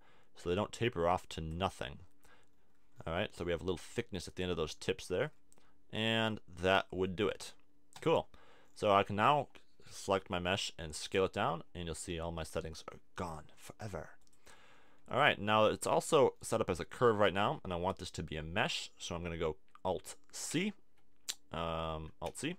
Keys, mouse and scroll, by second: 2.9-5.6 middle drag, 6.1-7.9 middle drag, 7.9-9.7 right drag, 9.7 click, 10.2 middle click, 10.2 s, 11.1-12.9 drag, 12.9 middle click, 13.5 s, 14.3 click, 14.7 middle click, 16.0 Tab, 17.0 middle click, 17.5 Tab, 20.5 ctrl+c, 22.3 alt+c.